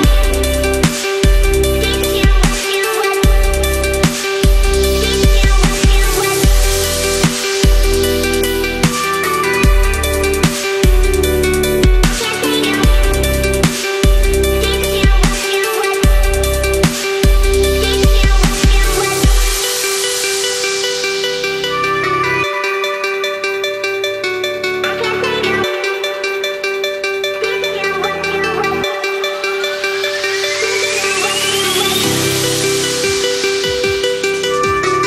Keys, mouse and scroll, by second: 11.2-13.9 ctrl+drag, 15.9 ctrl+-, 18.2-21.1 drag, 23.4 space, 23.5 click, 23.7 space, 24.2-24.7 click, 25.7 ctrl+-, 26.0 =, 26.2 =, 27.0 click, 28.8 space, 28.9 click, 31.6 right click, 32.5 click.